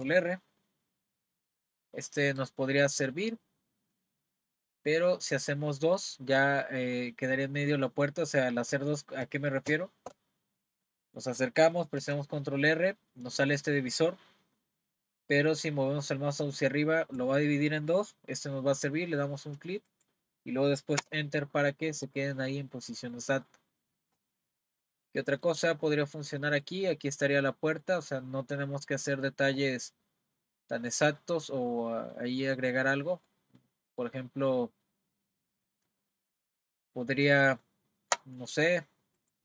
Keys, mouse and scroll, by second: 10.8 middle click, 12.0 r, 22.1 click, 22.7-28.5 middle drag, 28.5-29.1 scroll up 2, 29.1-31.9 scroll down 2, 31.9 scroll down 1, 32.9-38.5 middle drag, 38.5-39.2 scroll up 1, 39.2 click.